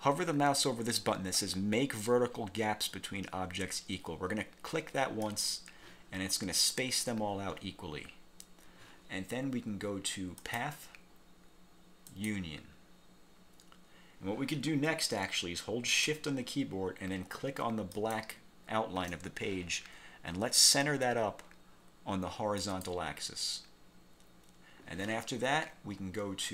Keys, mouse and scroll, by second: 5.4 click, 10.6 click, 12.2 click, 18.0 shift+click, 22.7 click.